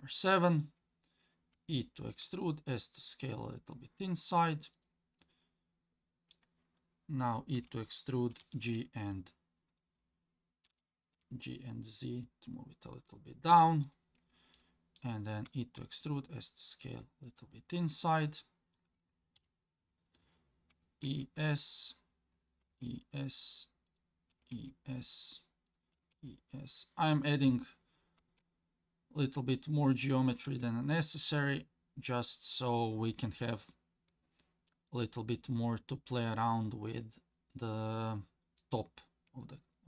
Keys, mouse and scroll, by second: 1.5 e, 5.2-6.3 middle drag, 7.6 e, 10.7 g, 14.5 middle click, 15.5 e, 17.9 middle click, 19.4 KP_7, 20.7 e, 22.6 e, 25.9 e, 28.2 e, 34.7-36.4 middle drag.